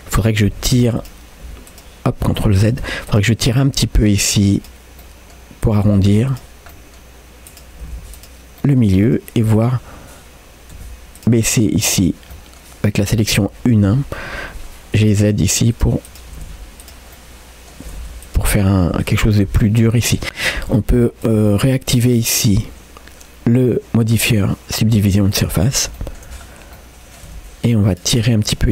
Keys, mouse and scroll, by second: 0.7 2, 1.0 click, 1.4 g, 2.7 ctrl+z, 3.1 click, 3.5 g, 5.0 middle click, 5.7 click, 5.9 g, 6.7 middle click, 7.5 click, 7.8 g, 8.6 middle click, 9.1 click, 9.6 click, 10.8 1, 11.2 click, 11.5 middle click, 11.9 scroll up 1, 12.3 middle click, 13.4 1, 15.0 g, 16.3 g, 17.2 middle click, 17.9 g, 18.6 middle click, 19.0 Tab, 19.6 middle click, 20.4-21.3 scroll down 1, 21.3 click, 22.2-24.5 drag, 25.1 scroll up 2, 25.3 middle click, 26.0 shift+middle click, 26.4-26.8 scroll up 2, 26.8 middle click, 27.3 Tab, 27.9 click, 28.5 click.